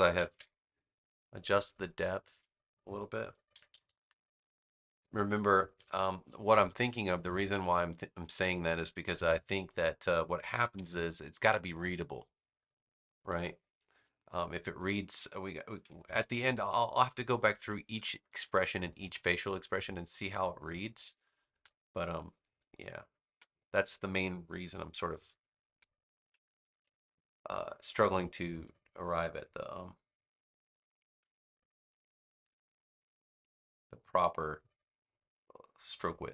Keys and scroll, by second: 0.0 5, 0.3 Return, 3.4 super+-, 5.3 super+=, 6.7 space, 10.4 6, 10.6 Return, 13.9 space, 16.0 super+-, 17.8 super+=, 19.5 space, 24.8 super+c, 25.2 space, 26.6 super+v.